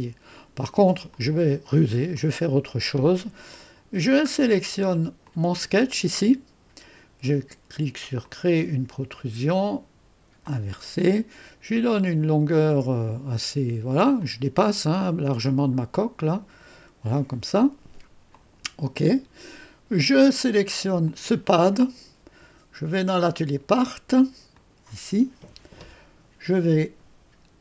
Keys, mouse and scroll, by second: 1.1-2.2 drag, 2.4 click, 3.4-4.9 scroll down 1, 5.2 click, 8.2 click, 10.4 click, 11.7-12.4 scroll up 2, 12.4-14.0 scroll up 1, 14.0 scroll up 1, 14.2 click, 18.3 click, 21.0 click, 23.2 click, 24.5 click.